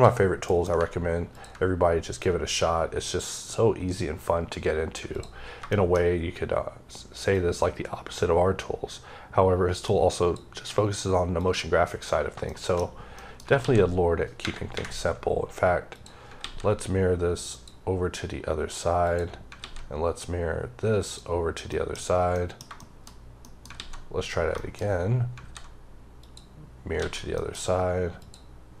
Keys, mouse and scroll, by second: 0.4 alt+m, 1.2 ctrl+click, 1.6-2.3 scroll up 2, 2.3-3.0 scroll up 1, 3.0-3.9 scroll up 1, 3.9-4.6 scroll up 1, 5.0 click, 5.6 shift+middle click, 5.9-7.2 shift+scroll up 3, 7.2 click, 11.3 click, 12.0 scroll down 3, 12.4 shift+middle click, 12.7-13.1 scroll down 2, 13.1 middle click, 13.5 alt+x, 14.6 ⦸, 15.8 click, 16.3 x, 17.4 click, 18.2 scroll up 2, 18.9 click, 19.5 x, 20.9 click, 21.6 middle click, 22.2 middle click, 23.6 alt+x, 24.5 shift+middle click, 25.3 alt+x, 26.1 click, 26.9 alt+a, 27.2 middle click, 27.4-28.1 scroll up 3, 28.1 click, 28.5-28.8 scroll down 3.